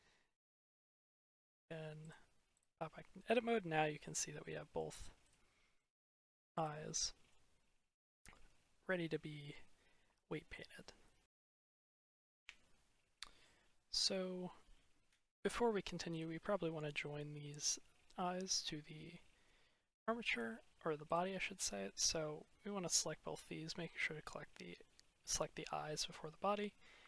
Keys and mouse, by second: 0.9 click, 2.0 click, 3.0-3.4 middle drag, 3.9 click, 4.3-4.6 middle drag, 5.1 click, 5.6-6.0 drag, 6.7 drag, 6.9 middle click, 7.9 click, 8.9 click, 9.1 middle click, 9.3 click, 9.6 middle click, 10.2 click, 11.9 click, 13.0-14.0 middle drag, 20.9 ctrl+click, 21.8-22.9 middle drag.